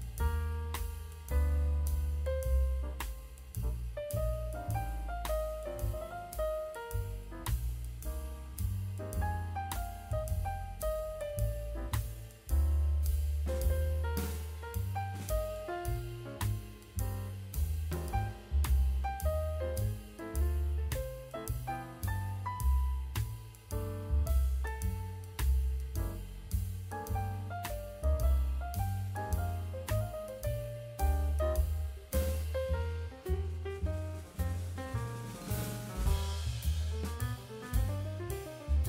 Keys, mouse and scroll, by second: 0.2 drag, 0.7 click, 1.4 click, 1.6 middle click, 2.1 click, 2.7-3.3 drag, 4.2 click, 5.1 drag, 5.3 click, 6.1 click, 6.6 middle click, 7.5 click, 8.2 click, 9.0-9.9 middle drag, 10.4 click, 10.7 middle click, 10.9 scroll down 1, 11.1 middle click, 11.5 click, 12.3 click, 13.0 click, 13.7 click, 14.1 ctrl+a, 14.6 click, 15.7 click, 16.1 ctrl+a, 17.1 click, 17.9 click, 18.3 click, 18.6 click, 19.2-19.6 middle drag, 20.2 click, 20.5 click, 20.7 drag, 20.9 click, 21.1 click, 21.4 click, 21.7 drag, 22.0 click, 23.3 click, 24.7 click, 25.3 click, 25.7-26.6 scroll up 3, 26.2 KP_1, 26.9 shift+d, 27.8-30.2 drag, 30.4 click, 30.6-30.9 middle drag, 31.1-31.5 scroll down 2, 31.5 middle click, 31.7 drag, 31.9-32.9 middle drag, 34.3 scroll up 1, 34.8 click, 35.0 middle click, 36.0 Tab, 36.3 middle click, 36.7 alt+z, 36.7 middle click, 37.1 click, 37.7 KP_1, 38.3 scroll up 2, 38.5 shift+middle click.